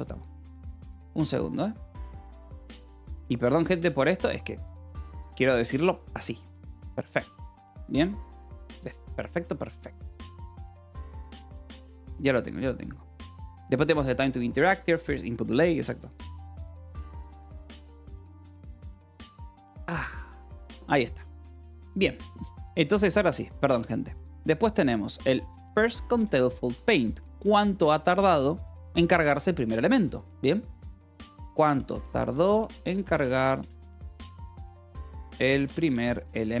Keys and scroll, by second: 25.9-27.6 typing, 30.8-36.6 typing.